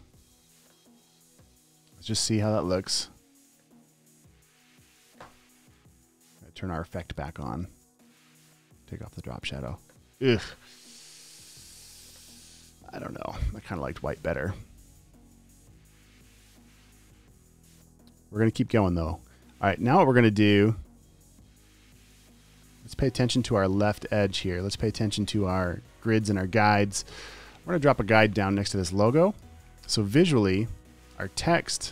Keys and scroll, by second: 10.1 v, 13.0 super+t, 14.5 v, 15.2 shift+Left, 15.9 Up, 16.9 v, 26.7 super+;, 30.1 v.